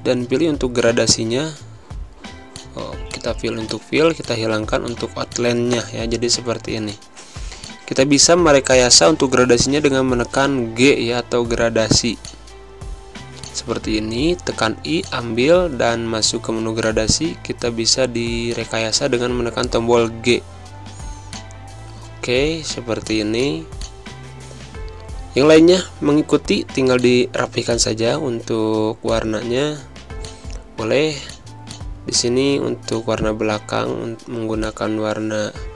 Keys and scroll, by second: 0.0-0.9 typing, 2.7-5.5 typing, 8.5-9.4 typing, 11.0 v, 12.5 i, 17.3 g, 23.0 space, 24.9-26.1 typing, 30.9 space.